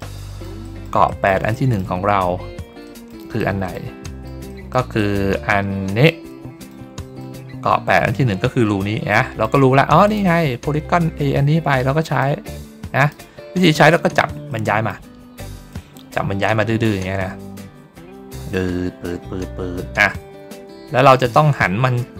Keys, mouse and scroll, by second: 0.1 middle click, 0.5 middle click, 1.0 middle click, 1.4 middle click, 2.2 ctrl+middle click, 2.7 middle click, 3.3 middle click, 3.9 middle click, 4.4 middle click, 4.9-6.0 middle drag, 6.2 middle click, 6.9 middle click, 7.4 ctrl+scroll down 1, 9.0 middle click, 9.9 click, 12.1 click, 13.3 ctrl+middle click, 14.0 ctrl+middle click, 14.4 middle click, 15.6-21.0 drag, 21.3 ctrl+middle click.